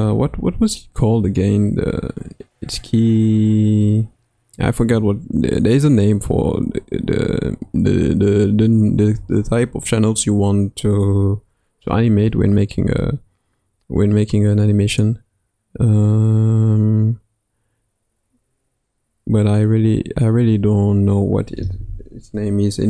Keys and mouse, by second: 11.8 n, 15.0 click, 20.3 n.